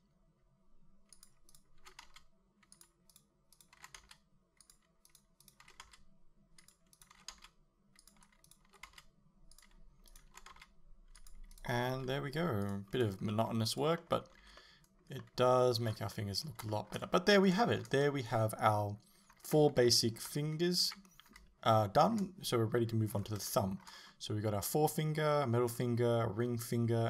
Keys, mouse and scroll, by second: 1.3 click, 1.5 right click, 1.8 g, 2.9 click, 3.1 right click, 3.6 right click, 3.8 g, 4.7 click, 5.1 right click, 5.5 right click, 5.7 g, 6.7 click, 7.0 right click, 7.2 g, 8.1 click, 8.5 right click, 8.7 g, 9.6 click, 10.1 right click, 10.3 g, 11.3 click, 11.6 right click, 11.8 g, 12.7 click, 13.0 right click, 13.2 g, 13.8 click, 14.0-24.1 middle drag, 14.5 a, 15.9 scroll down 1, 19.3-19.7 scroll up 1, 20.9 KP_7, 23.2-23.5 scroll up 1, 24.0 scroll down 1.